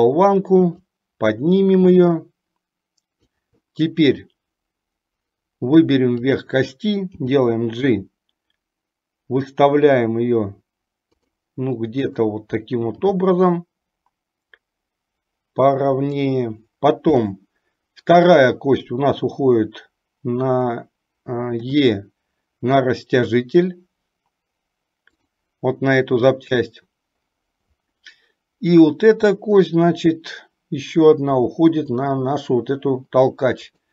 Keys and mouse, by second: 1.0-3.4 drag, 6.5 click, 7.2 g, 12.2 click, 13.1 g, 21.8 e, 31.4 e.